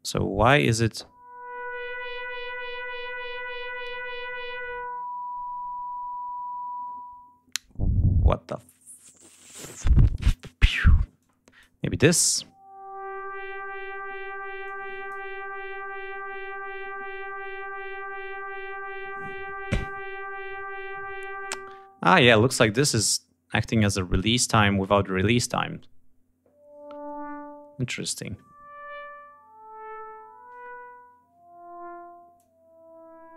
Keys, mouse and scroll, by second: 11.2 click, 14.6 click, 22.6-24.3 drag, 32.3-33.3 drag.